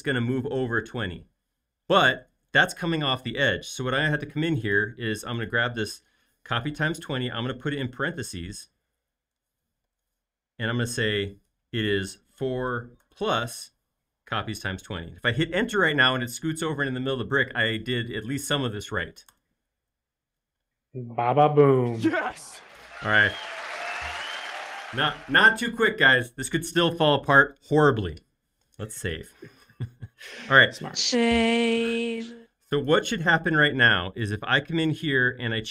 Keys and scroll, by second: 6.7 shift+0, 7.7 Left, 7.9 Left, 8.0 Left, 8.2 Left, 8.3 Left, 8.6 Left, 8.7 Left, 8.8 Left, 9.0 Left, 9.8 shift+9, 10.4 Left, 12.1 4, 13.0 shift+=, 19.4 Return, 28.8 super+s.